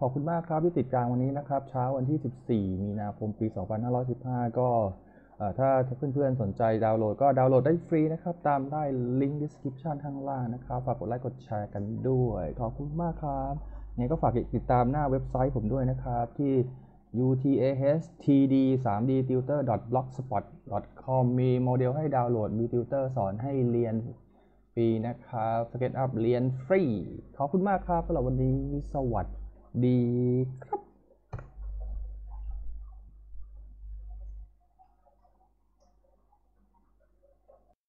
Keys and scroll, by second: 31.3 F10.